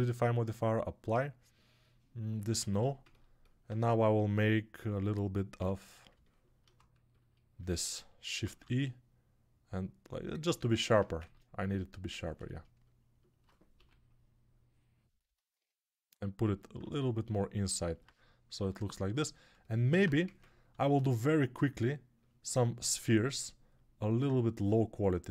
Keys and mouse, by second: 2.3 Tab, 6.0-7.1 alt+drag, 7.1-10.1 right drag, 8.5 shift+e, 11.0 ctrl+Tab, 13.6 g, 20.1 ctrl+Tab, 20.7 shift+a, 22.4-25.3 ctrl+alt+drag, 22.4-25.3 ctrl+alt+right drag.